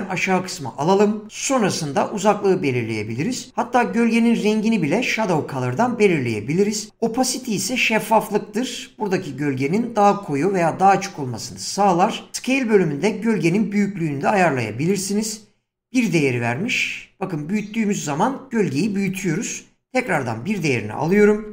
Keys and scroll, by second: 21.1 1, 21.4 Return.